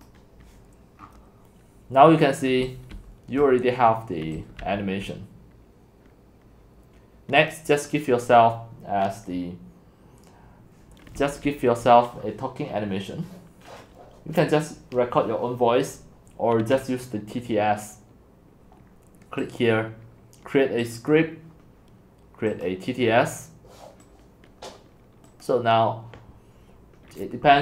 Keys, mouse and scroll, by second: 0.6 click, 1.0 scroll down 1, 1.0 scroll down 1, 1.1-2.1 scroll down 1, 2.1 scroll down 1, 2.1-2.6 scroll down 1, 2.6 x, 2.9 c, 3.4-4.4 drag, 4.1-5.1 typing, 5.1-9.0 drag, 11.1 x, 11.5 c, 11.8-16.9 drag, 25.4 click, 27.5 click.